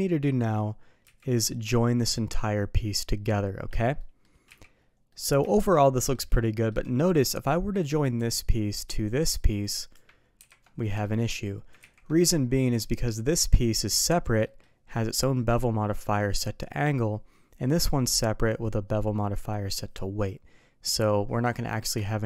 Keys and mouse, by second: 1.0 z, 3.9 middle drag, 4.4 z, 5.0 middle drag, 5.4 shift+middle drag, 5.9 middle click, 6.3-6.6 shift+middle drag, 9.2 shift+click, 10.3 ctrl+j, 10.7 middle drag, 11.8 ctrl+z, 12.1-12.5 middle drag, 13.3 click, 14.4 middle drag, 17.6 click, 20.9 click, 21.7 middle click, 22.0 shift+middle drag.